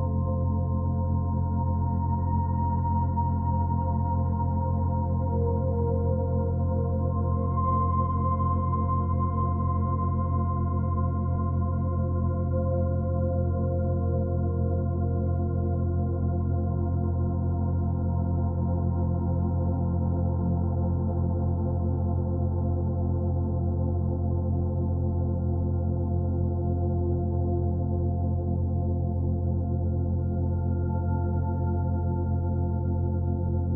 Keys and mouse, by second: 0.0-2.6 drag, 3.5-6.1 drag, 7.2 click, 10.9-13.5 drag, 15.5 click, 17.1-20.6 typing, 21.7 Return, 22.4 click, 23.9 click, 24.0 click, 25.6-28.4 typing, 30.9 click, 31.2 click.